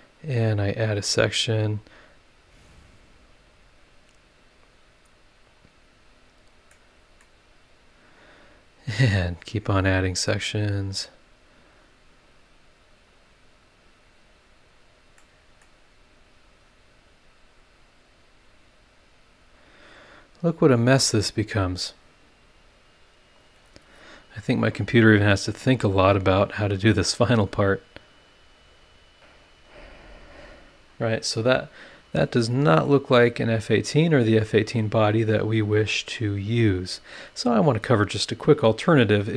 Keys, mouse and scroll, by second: 0.4 click, 1.2 click, 2.4 click, 3.5 click, 4.5 click, 5.4 click, 6.3 click, 6.7 middle click, 8.1 click, 9.1 click, 10.2 click, 10.5 click, 11.6 click, 13.0 click, 14.0 click, 15.2 middle click, 16.4 click, 17.5 click, 19.6 click, 20.6 click, 23.5-23.8 scroll down 1, 30.0-30.6 scroll down 2, 31.0 scroll down 2, 31.5 scroll up 2, 32.2 click, 33.1-34.1 scroll up 6, 34.8-38.0 drag, 34.9-38.0 right drag, 38.2 scroll down 2, 38.9 scroll up 2.